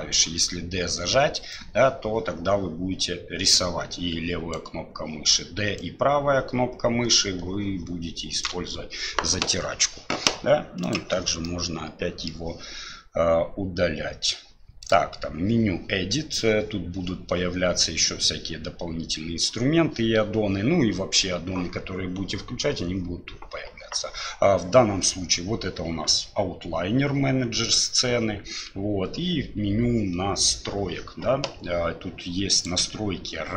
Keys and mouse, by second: 0.2-1.5 d, 1.5-5.8 drag, 4.6-5.7 d, 5.8-8.4 middle drag, 10.8 click, 11.4 middle click.